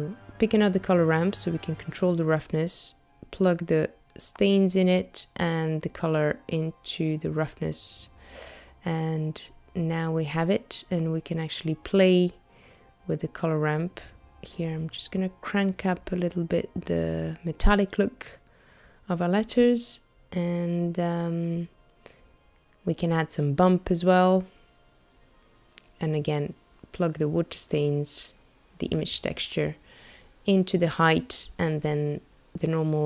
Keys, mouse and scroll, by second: 1.5 click, 4.2 click, 12.2 click, 19.8 shift+middle click, 20.5 click, 21.0 shift+a, 24.7 middle click, 25.8 click, 27.3 click, 29.2 middle click, 30.9-31.4 scroll up 3, 32.2-33.0 scroll up 3.